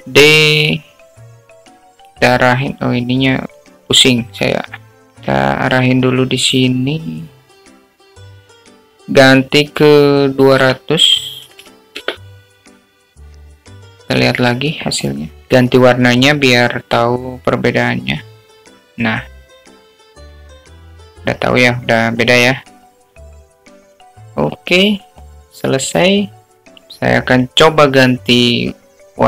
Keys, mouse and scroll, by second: 1.1 shift+d, 3.0-4.0 middle drag, 5.0-6.6 drag, 7.3-7.8 drag, 8.6-9.5 drag, 10.6-14.2 drag, 13.7 0, 18.5 click, 26.6 click.